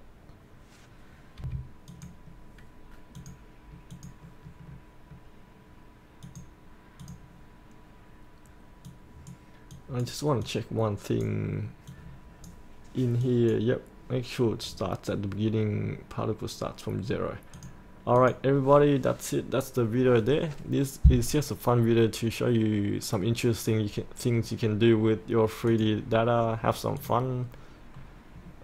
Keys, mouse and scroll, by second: 1.5 F8, 2.0-19.3 drag, 27.5 scroll down 1, 28.0-28.6 scroll up 1.